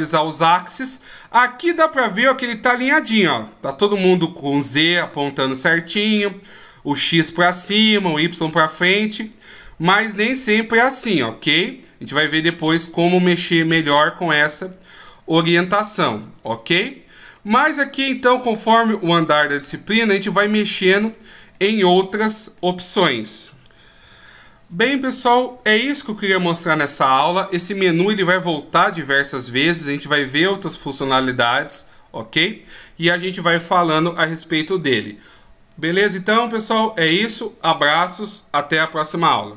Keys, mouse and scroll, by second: 0.7 middle click, 5.6 middle click, 7.1 middle click, 8.9 middle click, 12.9 middle click, 17.3 click, 17.9-19.3 scroll down 1, 19.3-19.9 scroll down 7, 19.9-20.6 scroll up 9, 21.6 middle click.